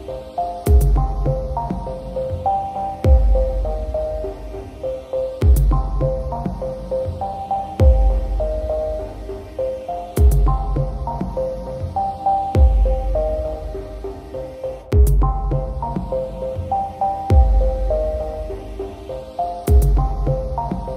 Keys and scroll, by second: 17.0 ctrl+j, 18.4 ctrl+t.